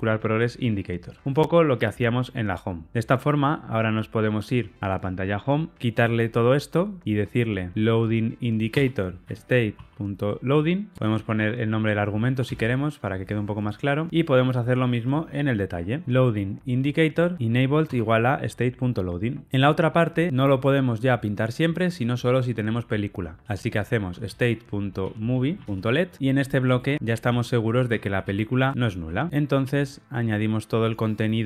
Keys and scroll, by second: 0.7 Return, 8.7 Return, 13.3 alt+Return, 17.3 Return, 17.7 Tab, 24.2 Return, 29.2 alt+super+l.